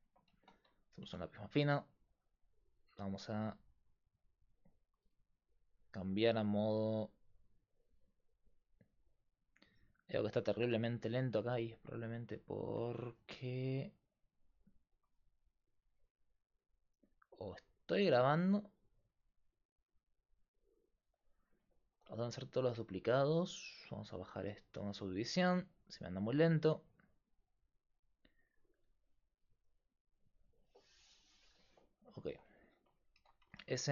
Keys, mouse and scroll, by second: 0.4 Tab, 1.1 Tab, 2.8-5.7 right drag, 5.7 click, 11.9-13.5 drag, 13.5-14.7 right drag, 14.7-16.5 middle drag, 16.5-18.1 drag, 18.1-23.1 middle drag, 23.1-27.2 drag, 25.7-27.2 middle drag, 25.7-28.5 right drag, 28.5-32.3 drag, 31.3-32.3 right drag, 32.3 Tab, 32.4 right click, 33.2 s.